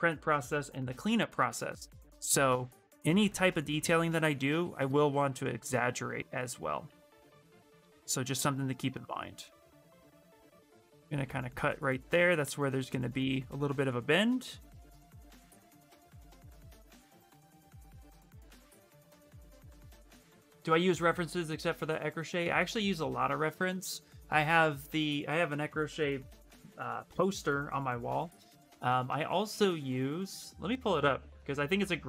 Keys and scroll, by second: 7.8 s, 10.9 s.